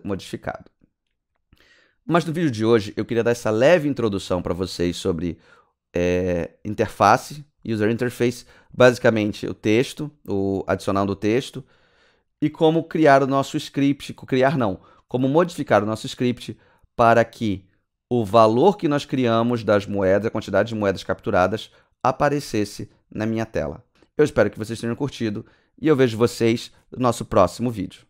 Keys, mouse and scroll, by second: 12.8 click, 16.1 click, 17.4 click.